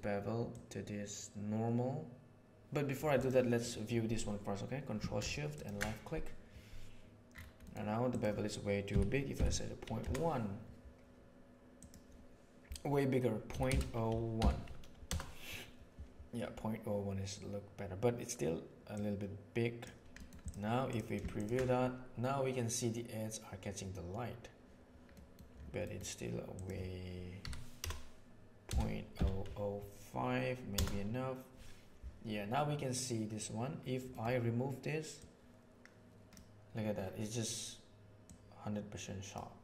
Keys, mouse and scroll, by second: 0.4-2.9 drag, 3.1 click, 3.5 click, 5.4 ctrl+shift+right click, 7.6 middle click, 8.0-10.8 drag, 11.7-15.9 drag, 18.9-19.8 drag, 20.8 click, 21.3 ctrl+shift+click, 25.1 middle click, 25.8 middle click, 26.5-31.9 drag, 35.1-36.2 drag, 38.2-39.3 drag.